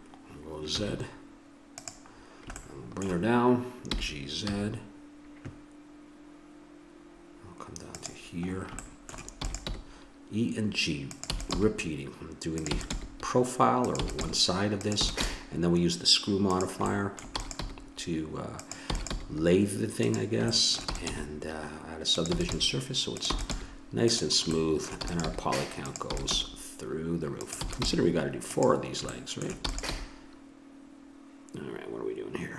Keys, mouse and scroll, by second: 3.9 g, 8.5 middle click, 9.4 e, 9.7 g, 11.3 e, 11.7 g, 12.7 e, 13.0 g, 14.0 e, 14.2 g, 15.0 e, 15.2 g, 16.9-18.0 drag, 17.4 e, 17.6 g, 18.8 e, 19.1 g, 20.5 click, 21.0 e, 21.1 g, 21.7 click, 22.4 e, 22.7 g, 23.3 e, 23.5 g, 25.0 e, 25.4 g, 26.1 e, 26.3 g, 27.6 e, 27.9 g, 29.1 middle click, 29.7 e, 29.9 g.